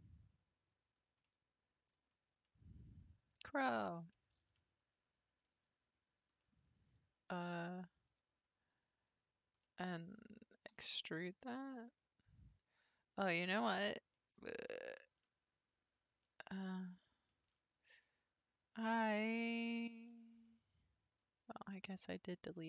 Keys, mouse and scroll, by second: 1.2 middle click, 1.9-2.2 scroll up 6, 2.4-4.4 middle drag, 4.4 ctrl+r, 6.4-8.1 middle drag, 8.1 3, 9.1 click, 9.6-10.7 middle drag, 10.7 e, 13.0 scroll down 1, 13.0-13.5 scroll up 4, 13.5 middle click, 14.3-16.2 scroll up 6, 15.0 shift+middle click, 16.2-19.5 middle drag, 19.5-19.9 scroll up 1, 19.9-21.4 shift+middle drag, 21.4 scroll down 1, 22.2-22.5 scroll up 1, 22.5 middle click.